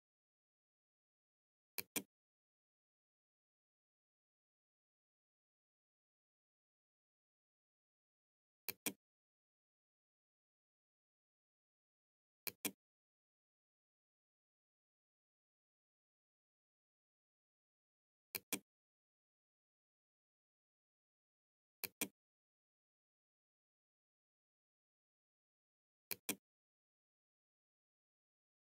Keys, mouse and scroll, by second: 0.8 click, 7.7 click, 11.2 click, 17.4 click, 20.9 click, 25.2 click, 28.4 click.